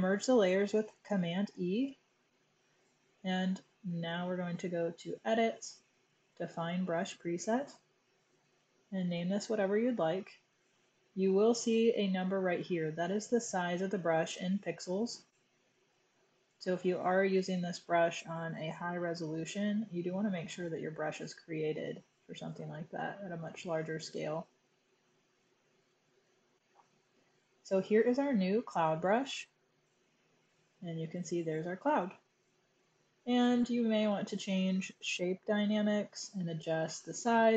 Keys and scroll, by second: 1.0 super+e, 7.5-9.1 typing.